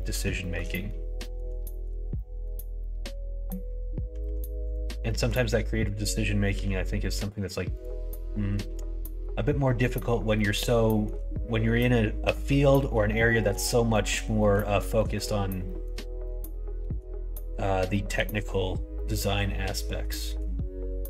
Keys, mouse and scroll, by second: 0.0 middle click, 0.1 scroll down 1, 0.3 scroll up 1, 0.4 shift+middle click, 0.7 middle click, 1.1 middle click, 1.6 shift+middle click, 2.1 middle click, 2.7 middle click, 4.2 1, 4.6 click, 5.0 middle click, 6.5 g, 8.5-9.0 scroll up 2, 8.6 middle click, 9.0 middle click, 9.2 scroll down 1, 9.6 scroll up 1, 9.7 middle click, 9.9 scroll down 1, 9.9 middle click, 10.3 scroll up 1, 10.4 middle click, 10.8 scroll up 1, 11.0 shift+middle click, 13.3 scroll up 1, 13.4 middle click, 13.8 shift+middle click, 14.3 middle click, 14.9 shift+middle click, 15.6 middle click, 15.8 scroll down 1, 16.2 scroll up 1, 16.2 middle click, 16.3 scroll down 1, 16.6 scroll up 1, 16.7 shift+middle click, 16.8-17.3 scroll down 1, 17.3 scroll up 1, 17.4 scroll down 1, 17.9 middle click, 18.1 scroll down 1, 18.9-20.4 middle drag.